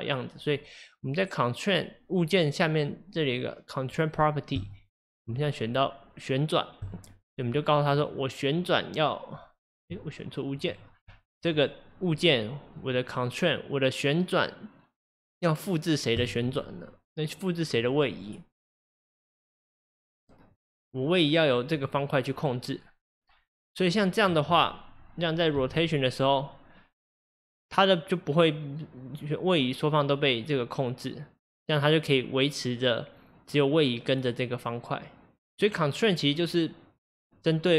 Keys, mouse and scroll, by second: 4.6 click, 5.3-8.1 drag, 10.6-11.6 drag, 12.8-15.9 drag, 17.8-20.6 drag, 23.9 click, 25.6 r.